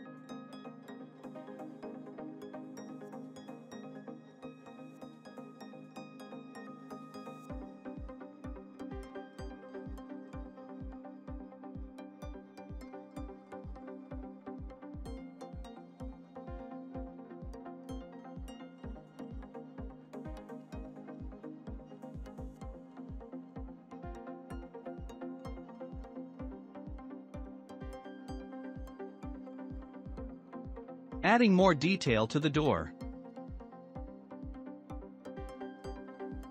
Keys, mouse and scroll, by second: 5.6-6.0 scroll down 3, 6.0-7.1 shift+middle drag, 7.1-8.2 drag, 8.2 scroll, 8.3 scroll up 4, 8.5-11.2 middle drag, 11.2 s, 13.7 click, 15.8-17.3 shift+middle drag, 17.3-17.6 scroll up 4, 18.6 scroll down 4, 19.8 click, 21.0 scroll down 1, 21.4-22.8 shift+middle drag, 22.8 click, 23.1-23.5 scroll down 3, 23.9-24.7 scroll down 2, 24.7-26.3 shift+middle drag, 25.7-26.2 scroll up 1, 26.3 click, 26.3 scroll up 2, 26.8 ctrl+a, 28.3-30.0 shift+middle drag, 30.0-31.7 drag, 31.7 shift+d, 35.0-35.5 drag, 35.5-36.0 scroll down 2, 36.0-36.5 shift+middle drag.